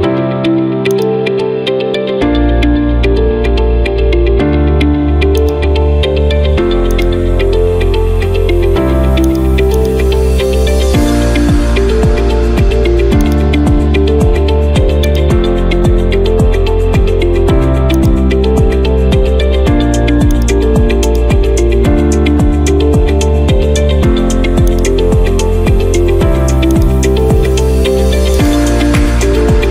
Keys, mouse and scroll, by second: 1.0 click, 5.5 click, 9.3 click, 9.9 click, 10.2 scroll, 13.3 click, 15.2-16.3 drag, 18.1-19.2 drag, 20.4 click, 21.2 click, 21.6 middle click, 22.0-23.1 middle click, 22.7 middle click, 23.0 middle click, 24.7 click, 25.6 middle click, 26.8 click, 28.5 click, 29.0-29.7 typing, 29.5 click.